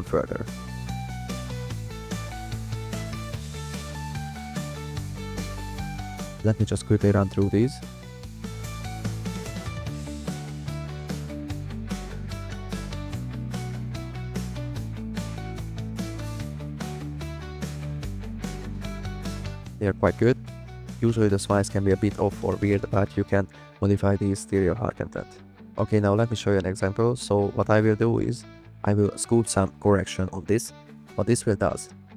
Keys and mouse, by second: 0.6-3.2 drag, 3.6-4.6 drag, 5.2 drag, 6.0-7.6 drag, 10.8 click, 10.9-11.3 drag, 11.5 drag, 12.9 click, 18.4-19.5 drag, 20.9 click, 21.2 click, 22.3 drag, 22.5 click, 26.7 click, 27.0 click, 28.5 click, 31.9 click.